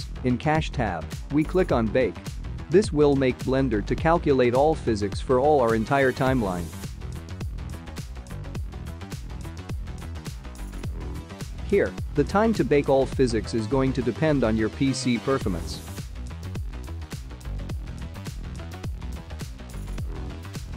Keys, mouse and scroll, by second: 0.1-1.4 scroll down 17, 1.7 click, 6.5 ctrl+s, 9.9 click.